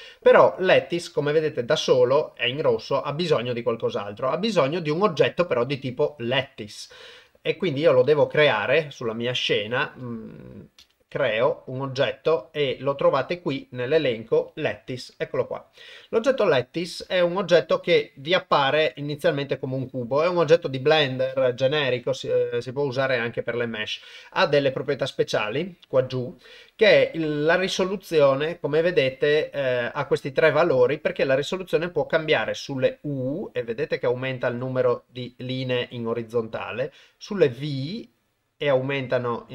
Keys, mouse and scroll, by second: 10.8 shift+a, 16.7-20.5 middle drag, 26.9 middle click, 27.9 ctrl+middle click, 29.3 middle click, 32.3-34.4 shift+drag, 34.8 middle click, 36.9-39.5 shift+drag.